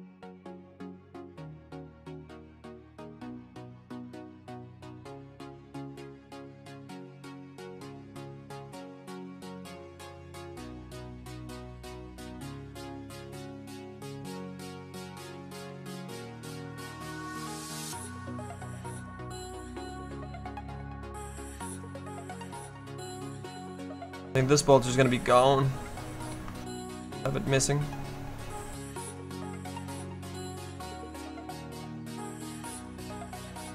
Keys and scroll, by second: 1.3 s, 4.4 z, 25.8 s.